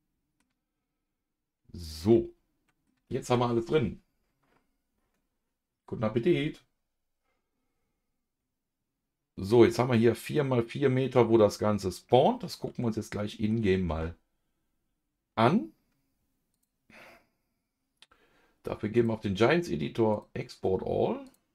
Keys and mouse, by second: 1.8 click, 2.1 middle click, 3.2 ctrl+s, 7.5-9.5 middle drag, 11.3-13.5 middle drag, 13.9 ctrl+s, 16.5 click, 18.9-20.3 drag.